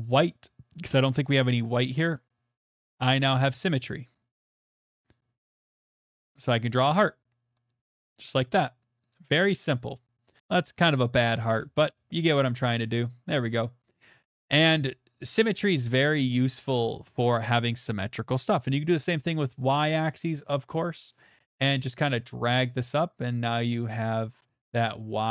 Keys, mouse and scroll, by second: 1.1 click, 2.6 click, 4.6 click, 6.6 click, 7.9 click, 8.5 middle click, 9.5 click, 11.2 middle click, 11.5 ctrl+z, 13.1 click, 14.6 middle click, 15.1 middle click, 18.8 click, 19.9 middle click, 20.4 middle click, 21.5 middle click.